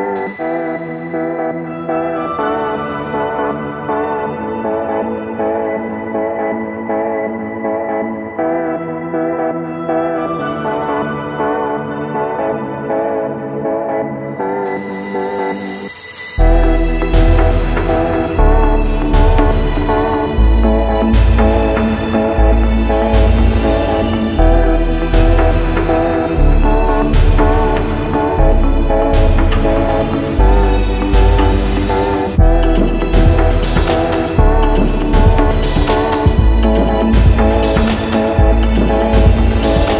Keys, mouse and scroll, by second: 1.1 alt+middle click, 3.7 alt+middle click, 4.2 alt+middle click, 5.9 alt+middle click, 6.4 alt+middle click, 8.1 middle click, 8.6-9.1 scroll up 4, 9.2 middle click, 9.5-10.2 scroll, 12.8 ctrl+h, 13.3 ctrl+k, 13.8 click, 15.1 alt+middle click, 15.4 scroll up 2, 16.0 middle click, 16.1 scroll up 2, 17.4-18.1 scroll, 17.6 z, 18.8-19.8 scroll, 19.6 z, 21.8 click, 22.2 scroll, 22.8 click, 23.6-26.6 typing, 25.2 click, 27.2 click, 27.8 middle click, 27.8 middle click, 28.1 a, 29.4 click, 31.8 click, 32.7 click, 33.0 middle click, 34.5 click, 35.7 middle click, 35.7 middle click, 36.3 middle click, 36.5 alt+middle click, 36.5 scroll, 36.8 alt+middle click, 37.1-37.8 scroll.